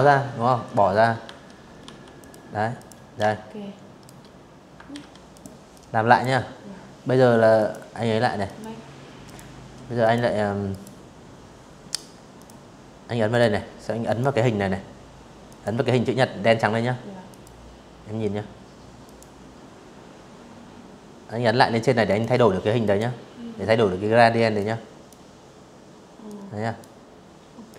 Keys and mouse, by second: 0.4 click, 0.8 shift+click, 2.6 ctrl+z, 3.0 click, 3.4 click, 5.2 click, 6.1 click, 6.9 click, 7.7 click, 8.3 right click, 10.0 click, 11.0 click, 11.7 click, 13.1 click, 14.9 click, 16.7 click, 19.7 click, 20.5 click, 22.2-22.7 drag, 23.9-24.5 drag, 25.3 click, 26.5 click.